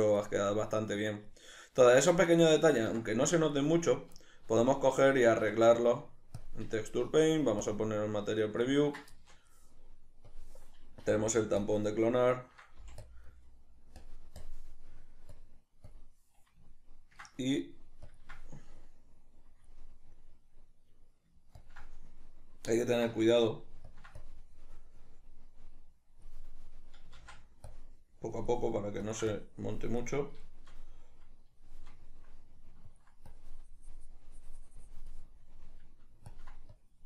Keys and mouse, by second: 3.9 right click, 4.6-10.7 shift+middle drag, 5.7 Tab, 7.4 z, 10.7-12.0 drag, 11.4 f, 12.2-12.9 ctrl+middle drag, 13.2 f, 13.4 click, 14.4 click, 14.8 drag, 15.7-16.4 drag, 17.1-18.4 ctrl+middle drag, 18.4-20.4 ctrl+drag, 20.4-22.0 middle drag, 22.0 ctrl+click, 22.4-23.0 middle drag, 23.2-24.3 ctrl+middle drag, 24.3-31.2 ctrl+drag, 27.6 ctrl+z, 31.2-33.3 middle drag, 33.3-37.0 ctrl+drag.